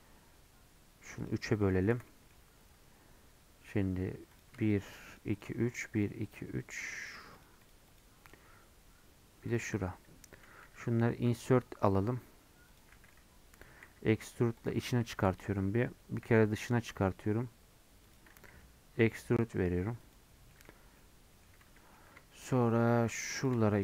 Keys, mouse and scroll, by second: 1.9 3, 2.1-4.4 middle drag, 4.4 click, 5.4 shift+click, 6.1 shift+click, 6.3 shift+click, 6.9 shift+click, 7.1 shift+click, 7.5 shift+click, 7.7 shift+click, 8.0 shift+click, 9.9-10.7 scroll up 1, 10.7 i, 12.9 middle click, 13.9 e, 14.8 scroll up 1, 15.1 shift+middle click, 15.4-16.3 scroll up 1, 16.3 i, 20.3 scroll down 1, 20.5 middle click, 20.7 Tab, 21.0 middle click, 21.5 Tab, 21.8-23.5 middle drag, 23.5 click.